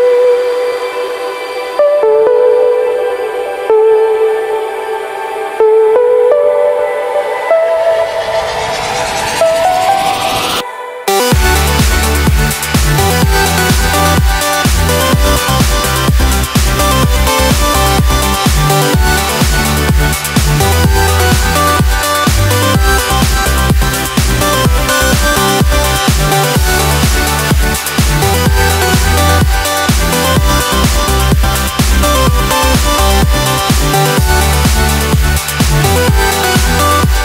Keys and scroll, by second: 6.6 ctrl+t.